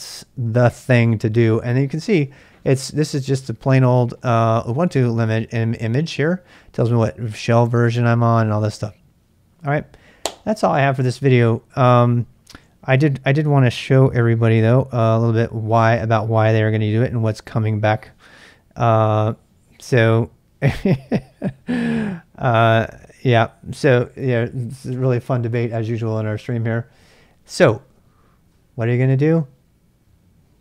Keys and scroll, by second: 0.9 Return, 13.9 ctrl+b, 14.7 z.